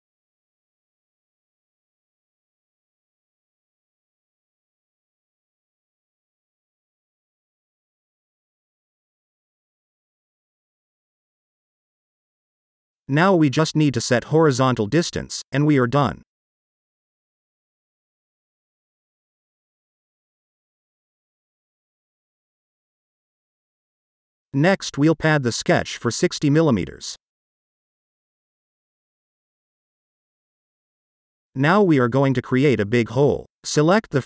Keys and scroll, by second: 0.3 t, 0.8 Return, 4.1 Return, 6.4 t, 7.0 Return, 9.7 t, 10.9 Return, 15.1 shift+h, 16.1-16.8 typing, 17.9 Return, 21.4-22.1 typing, 27.1-27.9 typing.